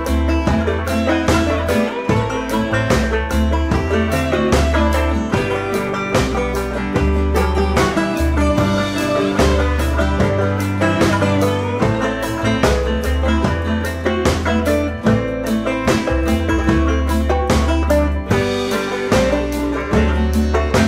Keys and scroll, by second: 1.1 Down, 5.5 Up, 6.7 Return, 16.1 ctrl+t, 20.2 Return.